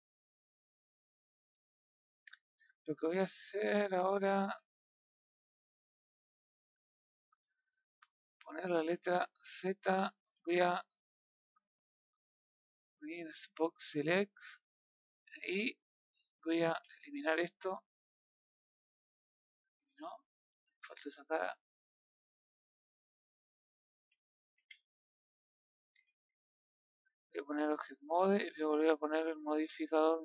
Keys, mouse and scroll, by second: 0.4 scroll down 1, 0.6-1.7 middle drag, 1.7 scroll down 1, 1.9-3.6 middle drag, 3.6 KP_1, 6.2 KP_3, 11.3 scroll up 3, 13.1 click, 13.4-15.2 scroll down 2, 15.6 click, 18.0 Delete, 19.0-19.4 scroll up 1, 19.6 scroll up 5, 19.8 middle click, 20.5 middle click, 21.5 b, 23.7 click, 25.1 Delete, 26.2 scroll down 1, 26.5-27.4 middle drag, 27.4 Tab.